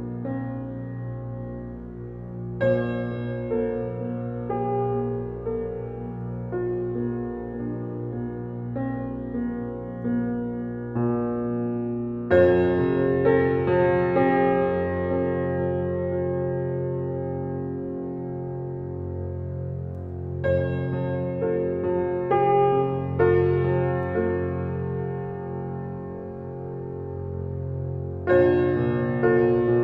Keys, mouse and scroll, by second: 16.6 Escape, 18.1-18.4 scroll down 1, 21.0 click.